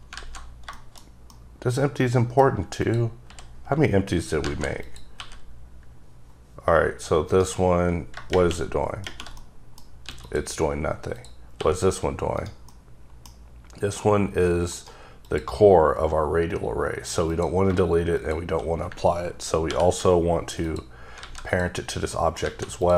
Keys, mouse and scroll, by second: 0.1 alt+z, 0.7 shift+middle click, 2.8 click, 3.2 h, 4.4 z, 4.8 click, 5.1 g, 7.3 right click, 7.6-8.3 scroll down 3, 9.4 middle click, 10.0 x, 10.2 click, 10.6-11.1 scroll up 2, 11.1 click, 11.6 g, 12.4 right click, 12.7 middle click, 13.3 scroll up 3, 14.7 right click, 15.2 click, 17.3 click, 18.1 shift+click, 19.7 ctrl+p, 20.6 click, 21.2 alt+a, 21.5 click, 21.8-22.1 scroll down 1, 22.1 middle click, 22.4 alt+a, 22.8 click.